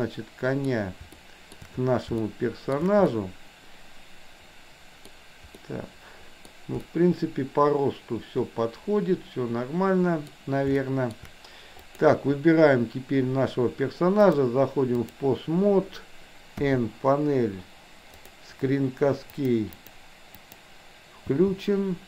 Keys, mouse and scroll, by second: 1.1 shift+scroll up 1, 1.4 shift+middle click, 2.2-2.7 shift+middle drag, 3.0-5.0 middle drag, 5.6 scroll up 1, 5.7-6.5 middle drag, 6.7 scroll up 1, 6.9-10.2 middle drag, 10.7-11.1 shift+middle drag, 11.9 click, 14.4 click, 16.6 n, 18.2 drag, 20.4 click, 21.2 n.